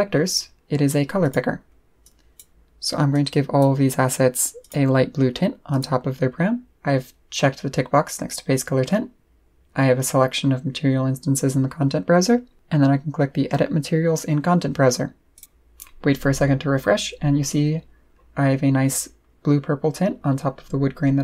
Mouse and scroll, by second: 0.3 click, 1.2 click, 2.0 click, 3.1 click, 4.6 click, 5.7 click, 15.3 click.